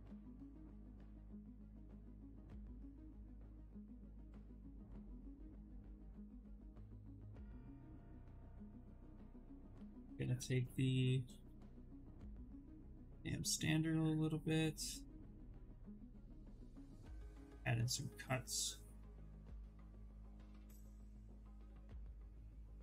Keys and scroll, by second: 7.6 b, 8.2 w, 8.5 s, 9.8 b, 10.2 s.